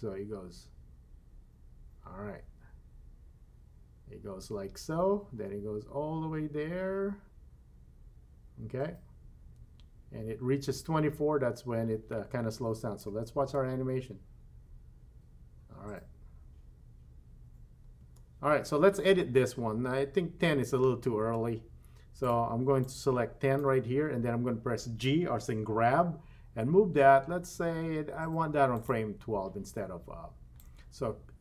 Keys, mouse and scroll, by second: 13.4 space, 18.1 space, 22.2 click, 22.8-23.6 drag, 26.6 g, 30.6-31.4 drag.